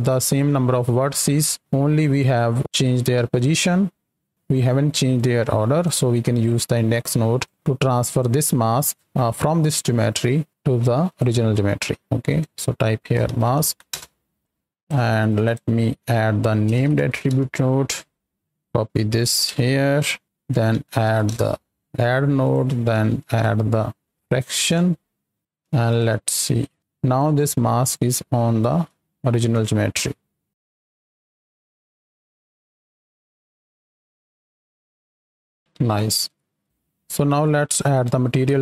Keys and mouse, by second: 5.1 click, 6.9 click, 7.8 click, 10.5 click, 11.5 click, 12.2-13.9 drag, 14.4 click, 15.1 shift+a, 18.6 ctrl+c, 19.4 ctrl+v, 20.2 click, 21.0 d, 22.4 click, 23.1 click, 25.9-26.7 ctrl+shift+drag, 27.1 click, 28.5 middle click, 29.0-29.3 shift+middle drag, 29.5-30.0 middle drag, 30.7 shift+click, 31.4 middle click, 31.9 KP_7, 32.5-33.6 right drag, 33.8-35.3 shift+drag, 35.5-36.2 right drag, 36.2 x, 36.6-37.4 right drag, 37.4-37.7 drag.